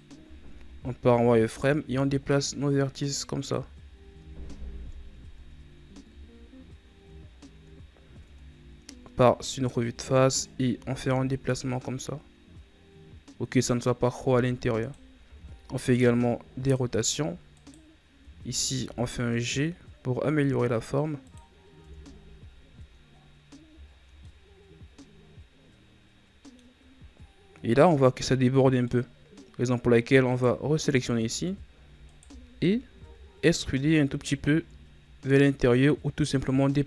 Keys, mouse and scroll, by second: 0.2 scroll down 5, 0.5 z, 1.4 alt+right click, 2.2-3.5 drag, 3.5 z, 3.9-4.2 scroll down 1, 4.2-5.2 scroll up 7, 5.2 Tab, 6.0 KP_1, 7.3-7.7 scroll down 3, 7.7 scroll up 2, 8.1 Tab, 9.4 alt+right click, 10.7 g, 15.1 r, 17.4 alt+right click, 18.6 g, 21.7 Tab, 22.4-23.8 scroll down 5, 23.8 scroll down 1, 24.1-26.6 middle drag, 26.6-27.6 scroll up 2, 27.6-28.8 scroll up 8, 28.8-30.2 middle drag, 30.2 right drag, 30.6-31.2 middle drag, 31.2 Tab, 31.9 alt+right click, 32.9 KP_1, 33.5 z, 34.4-36.6 scroll up 5, 36.6-36.8 drag.